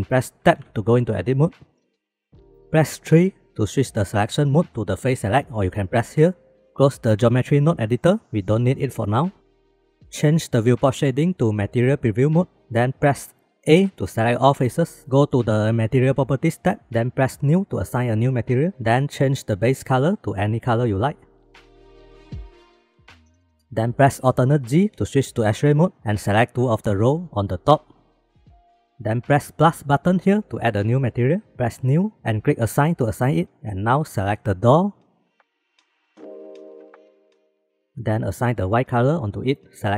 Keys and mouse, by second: 0.0 shift+click, 0.5 Tab, 1.8 shift+b, 3.2 3, 7.6-9.6 drag, 11.7 click, 14.5 a, 16.6 click, 18.3 click, 23.3 KP_8, 23.4 KP_8, 24.9 alt+z, 26.5-28.6 drag, 30.4 click, 31.6 click, 34.0 shift+middle click, 35.3-37.7 drag, 39.7 click.